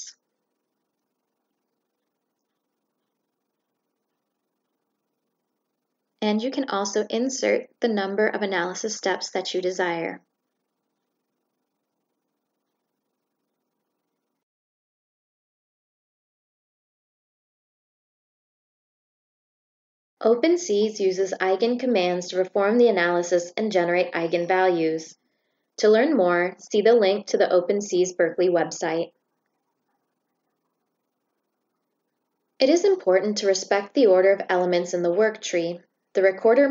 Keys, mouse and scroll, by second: 1.4 shift+click, 3.0-5.2 shift+drag, 6.2 shift+click, 6.5 click, 7.1 click, 8.3 click, 13.2 click, 15.9 click, 16.0 middle click, 18.3-19.2 shift+drag, 20.2 shift+click, 21.7 click, 28.9-29.9 drag, 31.2 click.